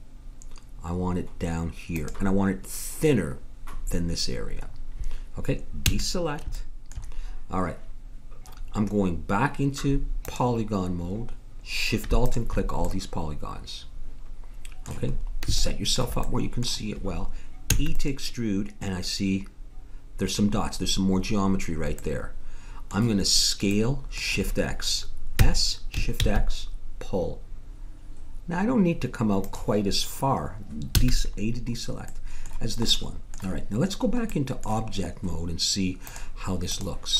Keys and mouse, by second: 4.9-9.4 middle drag, 5.8 a, 10.2-12.1 drag, 12.2-14.1 drag, 12.9 middle click, 14.3 middle click, 15.1-16.4 middle drag, 17.7 e, 22.0-25.3 middle drag, 25.3 s, 26.2-28.6 middle drag, 31.0 a, 36.5 click.